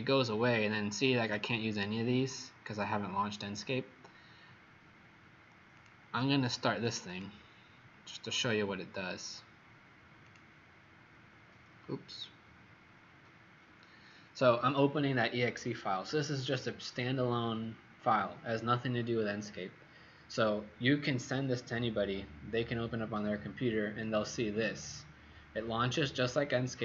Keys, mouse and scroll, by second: 7.0 click, 10.2 click, 10.3 click, 12.1 click.